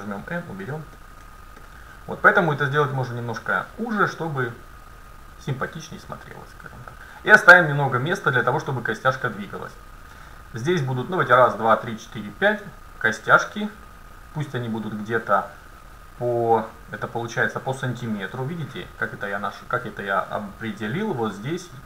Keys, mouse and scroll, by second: 1.0-1.7 scroll down 1, 1.7-2.9 middle drag, 2.9 scroll up 1, 3.2 middle click, 4.6-6.3 drag.